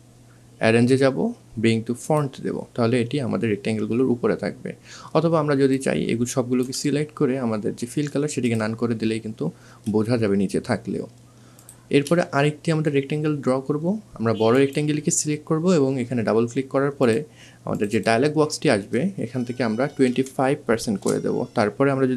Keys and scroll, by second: 20.6 KP_5, 21.3 5.